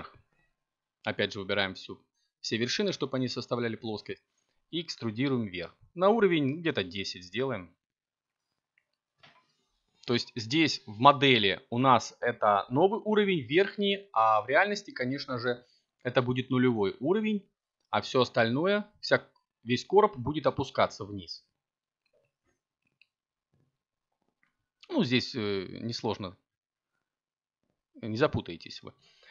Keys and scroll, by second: 13.2 Tab, 16.1 a, 18.8 8, 20.5 7, 27.1 7.